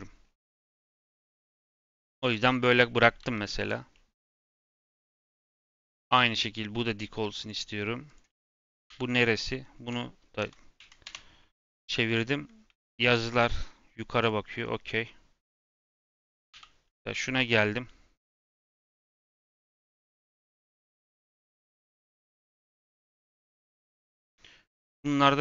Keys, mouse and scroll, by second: 2.2 click, 2.6 l, 3.1 g, 3.9-4.2 middle drag, 4.2 click, 5.1 l, 6.0 g, 7.7 middle click, 8.0 click, 8.8 l, 9.6 r, 11.8 scroll up 2, 12.1-13.4 middle drag, 13.4 g, 15.0 middle click, 15.4 click, 16.5 l, 17.1-18.4 middle drag, 18.4 g, 18.9 r, 20.1 g, 22.2 r, 25.0 Tab, 25.3 Tab.